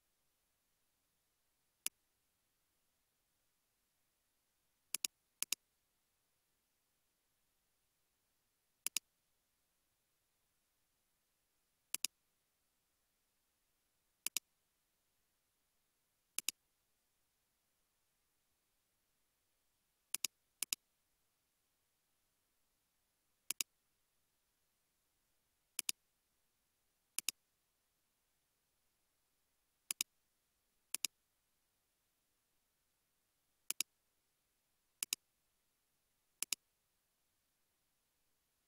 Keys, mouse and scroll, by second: 1.9 typing, 5.4 double click, 6.8 typing, 7.6 Return, 9.4-10.3 typing, 10.7 Return, 12.6-13.6 typing, 14.9 typing, 15.3 Return, 16.7-17.9 typing, 20.7 double click, 21.2 typing, 28.1 typing, 31.7 scroll down 1, 32.1 scroll up 1, 36.5 typing.